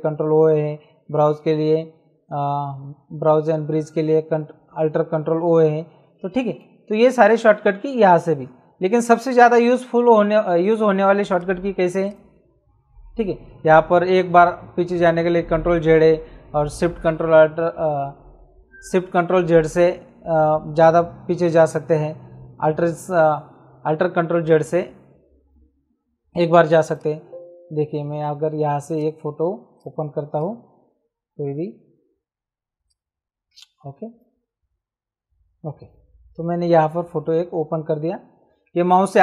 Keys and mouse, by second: 11.3 click, 25.5 Escape, 26.3 click, 28.2 Escape, 28.9 click, 32.8 click.